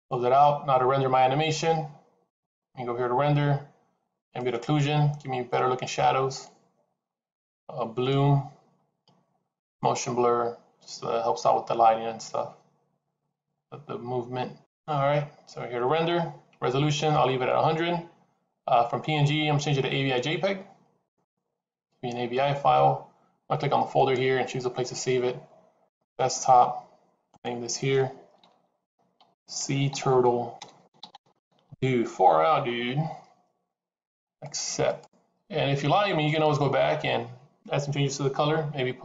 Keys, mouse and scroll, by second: 2.2 click, 14.6 click, 15.9-17.6 scroll up 3, 18.8 click, 23.9 click.